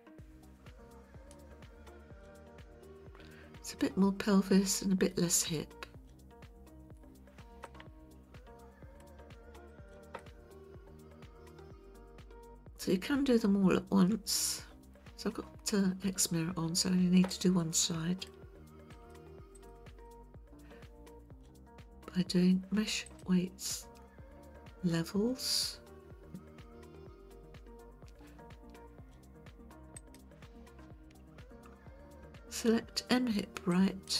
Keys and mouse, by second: 2.4-7.0 drag, 7.6-9.0 middle drag, 9.7 click, 10.2-14.9 middle drag, 17.3-18.3 middle drag, 19.0 shift+click, 19.6 shift+click, 20.0-21.1 middle drag, 23.2-30.2 drag, 33.7 click.